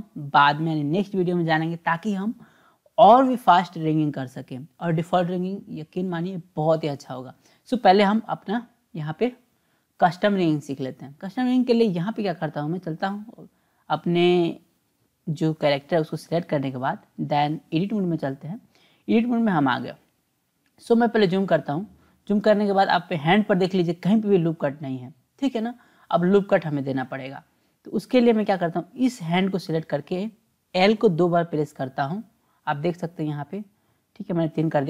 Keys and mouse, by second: 12.7-14.0 drag, 16.7-18.0 drag, 21.0-25.8 drag, 26.9-28.0 drag, 28.7 click, 30.8 l, 30.9 l.